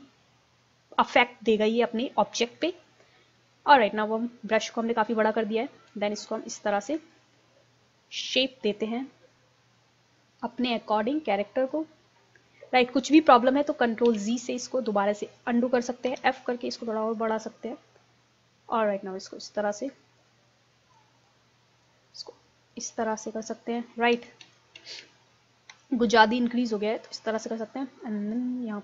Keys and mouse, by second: 2.8-5.1 middle drag, 5.4 middle click, 6.0 click, 7.1-9.0 drag, 9.0-10.6 middle drag, 10.6-12.0 drag, 13.2 ctrl+z, 14.1 ctrl+z, 16.1 f, 18.4-21.0 drag, 24.2 ctrl+z, 24.4 ctrl+z, 24.8 ctrl+z, 25.9 f.